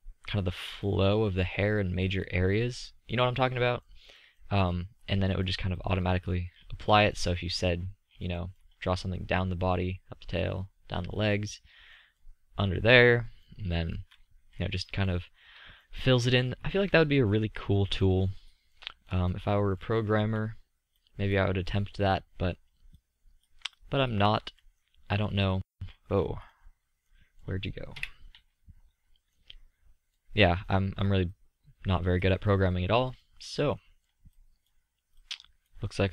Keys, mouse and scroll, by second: 0.7 drag, 1.8-2.4 drag, 5.5 middle drag, 6.0 middle click, 6.6-7.3 drag, 7.6 middle drag, 8.1-9.1 middle drag, 19.6 middle click, 21.8-25.3 drag, 25.3-26.2 middle drag, 26.4-26.8 middle drag, 26.9 middle click, 27.9 middle click, 28.5 KP_5, 33.2 middle click, 33.9 middle click.